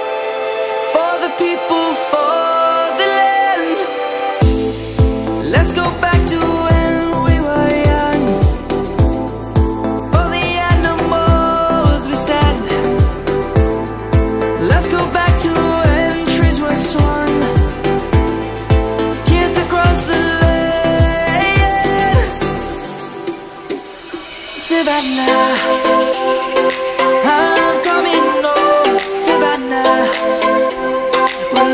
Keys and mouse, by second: 0.9 middle click, 2.3 shift+middle click, 2.7 shift+middle click, 3.4 shift+click, 3.6 shift+click, 5.2 middle click, 5.6 shift+middle click, 6.1 shift+click, 6.2 shift+click, 7.4 middle click, 9.4 click, 17.2 Tab, 17.2 click, 17.7 middle click, 19.2 click, 26.4 Tab, 27.1 click, 29.2 a, 30.7 shift+click.